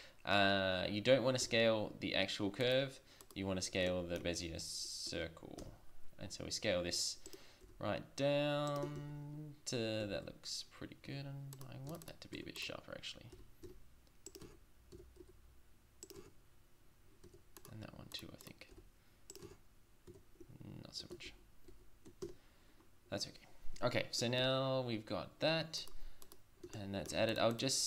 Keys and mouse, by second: 1.4 s, 3.2-3.9 drag, 4.0 drag, 4.6-5.0 drag, 5.6 s, 7.7 s, 9.0 shift+z, 10.1 shift+z, 11.1 Tab, 11.9 Tab, 12.4 Tab, 13.4 s, 14.4 Tab, 14.9 Tab, 15.2 s, 16.2 Tab, 17.2 Tab, 18.8 s, 19.5 Tab, 20.1 Tab, 21.3 ctrl+z, 21.7 ctrl+z, 22.2 Tab.